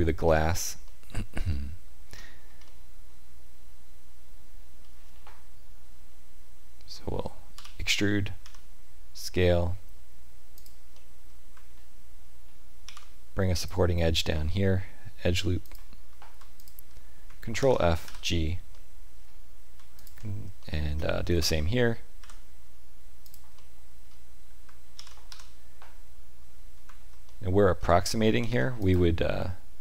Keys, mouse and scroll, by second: 0.2 scroll up 2, 0.8 shift+middle click, 2.1-2.6 scroll up 1, 2.6 middle click, 7.4 e, 10.9 middle click, 12.8 ctrl+r, 16.5 alt+click, 17.5 ctrl+f, 18.6 middle click, 19.9 alt+click, 20.5 shift+middle click, 21.3 e, 23.5 middle click, 24.8 ctrl+f, 27.2 middle click, 28.3 ctrl+r.